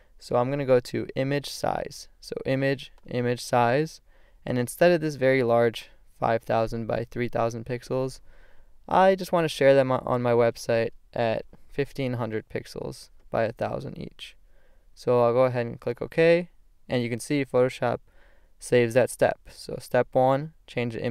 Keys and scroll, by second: 10.5 5, 12.3 0.